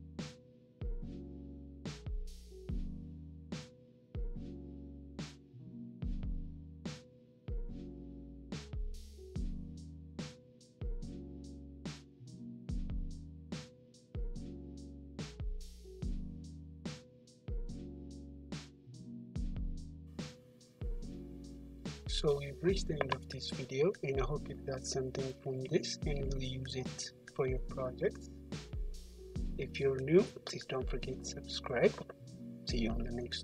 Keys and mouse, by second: 0.8-1.9 middle drag, 1.9-3.6 middle drag, 3.6-4.0 right drag, 4.0-11.9 middle drag, 11.9-13.2 drag, 13.2-17.8 middle drag, 17.8 right drag, 17.8 click, 18.3-19.4 middle drag, 21.9-23.6 middle drag, 24.2-33.4 middle drag, 31.7 `.